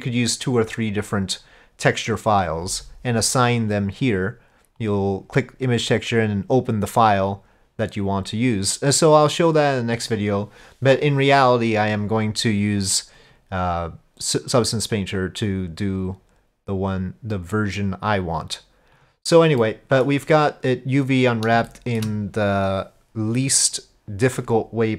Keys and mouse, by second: 3.8-4.9 drag, 7.3-10.2 drag, 13.2-18.8 drag, 19.0 click, 19.6 middle drag, 19.9 click, 21.7-22.0 shift+drag.